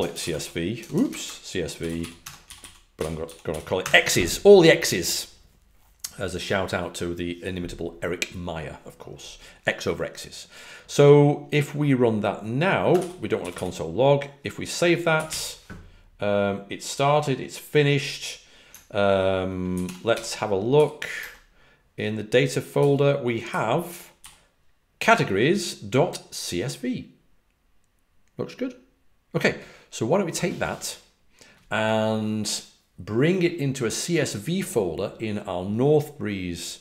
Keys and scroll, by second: 0.0-4.2 typing, 12.8-15.7 typing, 22.7-24.6 typing.